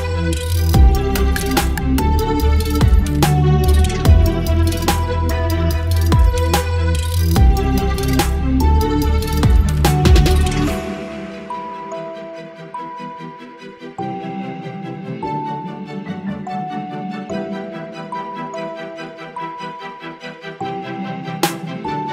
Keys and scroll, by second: 1.4 v, 1.8 space, 2.7 Right, 2.8 Right, 2.9 Right, 3.6 Left, 3.7 Left, 4.8 Left, 5.3 Left, 5.4 Left, 5.4 Left, 5.6 Left, 6.0 Right, 6.0 Right, 6.1 Right, 6.1 Right, 7.4 Right, 13.4 Delete, 13.8 ctrl+d, 14.0 space, 16.2 space, 17.9 space.